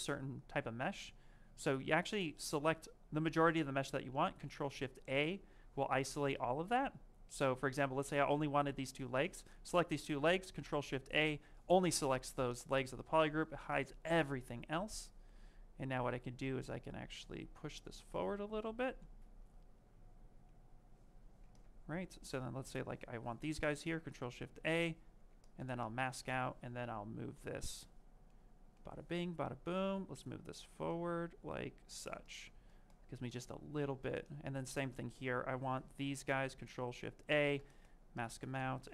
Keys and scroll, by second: 2.5 ctrl+shift+space, 4.2 ctrl+shift+a, 10.5 ctrl+shift+a, 21.0 q, 25.0 ctrl+z.